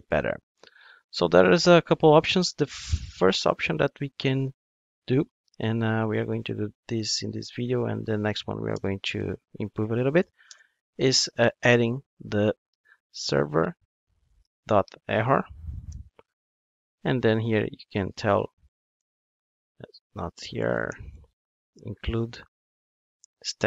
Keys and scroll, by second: 14.2 Return.